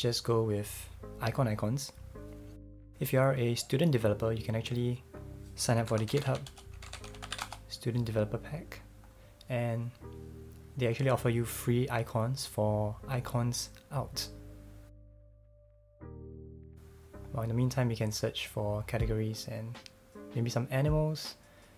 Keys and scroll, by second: 5.6-7.8 typing.